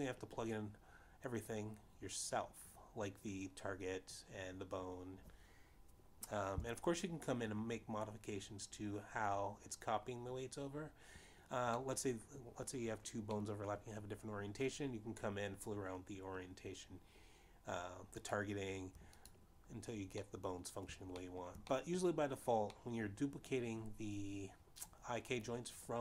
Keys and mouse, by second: 1.0 click, 13.7 middle click, 15.5 middle click, 20.2 click, 21.3 click, 22.2 middle click, 23.4 shift+middle click, 24.0 middle click, 24.8 middle click.